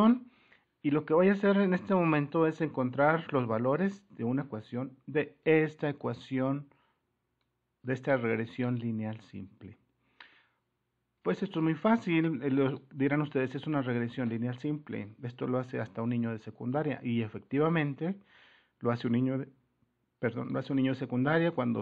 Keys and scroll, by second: 11.3 alt+Tab.